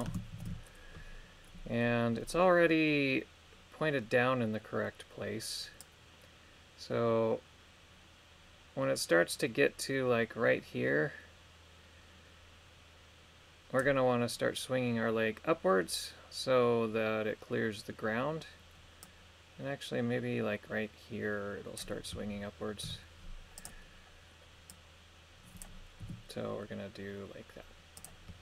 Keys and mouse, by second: 0.4 shift+Left, 5.8-8.9 drag, 19.0-21.8 drag, 22.8 i, 24.7 click, 26.0 r, 28.0 click.